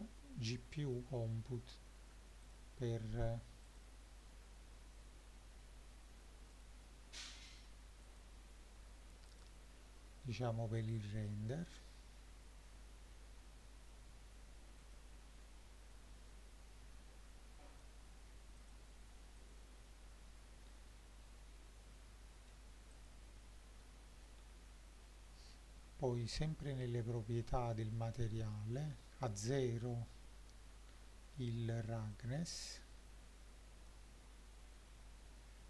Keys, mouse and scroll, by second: 2.5 click, 3.7 click, 6.6 click, 9.3 click, 10.9 click, 14.8 click, 18.6 click, 19.4 click, 20.7-22.5 shift+middle drag, 22.9 click, 24.4-25.0 scroll down 2, 25.0-25.9 scroll down 3, 28.0-29.8 drag, 32.1-33.9 drag.